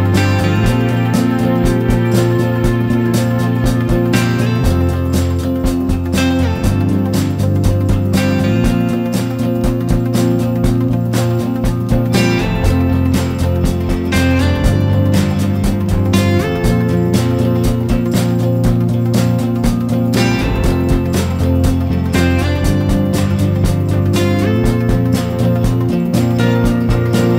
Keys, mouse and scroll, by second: 0.0-0.7 shift+middle drag, 0.7 click, 0.9 Tab, 1.4 3, 1.7 click, 1.8 shift+drag, 2.0 shift+drag, 2.1 shift+drag, 2.4 g, 3.0 Tab, 3.5-5.0 drag, 7.4 click, 7.6 Tab, 8.1 2, 8.2 click, 8.5 shift+click, 9.0 shift+click, 9.4-13.4 typing, 10.2 Tab, 10.3 click, 10.6 Tab, 12.5 Tab, 14.7 s, 15.3-16.1 right drag, 16.1 s, 18.7 click, 19.0 drag, 21.3 scroll down 1, 21.6 click, 22.0 shift+middle click, 22.2-23.8 scroll up 3, 22.5 shift+middle drag, 23.8-24.1 shift+middle drag, 24.1-24.7 scroll down 4, 24.7-25.4 shift+middle drag, 25.4 Tab, 25.5 click, 25.9 ctrl+c, 26.0 ctrl+v, 26.7 g.